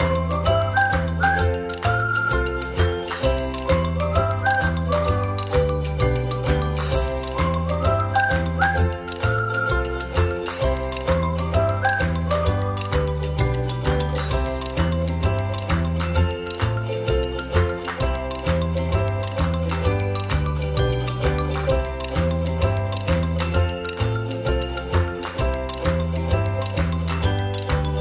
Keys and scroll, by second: 3.4 alt+shift+space, 18.0 Up, 19.2 Right, 19.6 Up, 20.1 Right, 21.4 Down, 22.6 Up, 23.5 Right, 27.7 Delete.